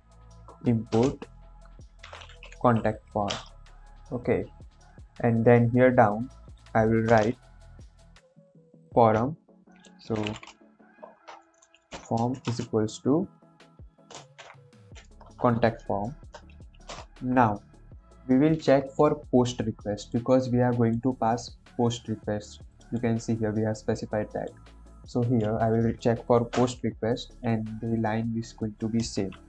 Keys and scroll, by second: 0.0-2.8 typing, 3.0 Down, 3.2 Return, 7.0 Return, 7.2 Return, 10.0-12.4 typing, 14.3 shift+c, 14.7 o, 15.3 Return, 16.0 shift+9, 16.8 Return, 29.2 ctrl+c.